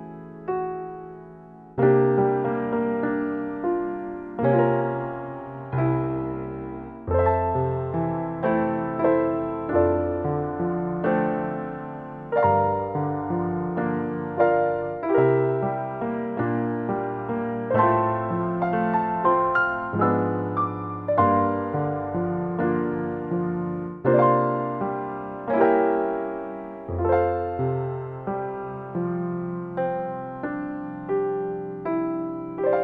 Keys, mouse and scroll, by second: 7.3 click, 10.4 click, 11.6-11.9 scroll up 4, 11.9 middle click, 11.9 scroll down 1, 12.8-13.5 scroll down 1, 13.5-14.9 scroll down 1, 14.9 click, 18.8 ctrl+shift+d, 22.1-22.6 scroll down 3, 22.4 middle click, 23.2 click, 24.5 click, 25.7 click, 26.7 click, 28.1-29.0 scroll up 1, 29.0 middle click, 30.7 click, 31.8 shift+d.